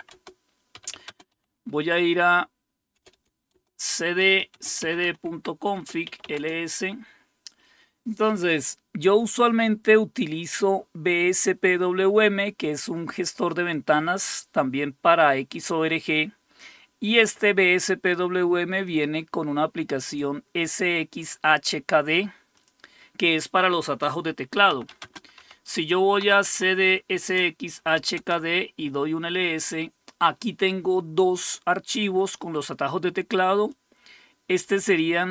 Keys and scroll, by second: 0.0-1.3 typing, 2.7-6.7 typing, 24.5-26.2 typing, 26.5 Tab, 27.2 Return, 27.6-28.3 typing.